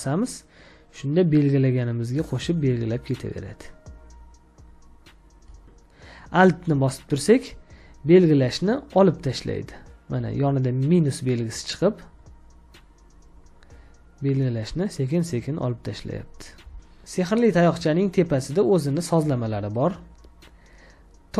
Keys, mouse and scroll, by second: 1.5 shift+click, 4.5 shift+click, 12.0 alt+click, 13.3 alt+click, 16.0 alt+click.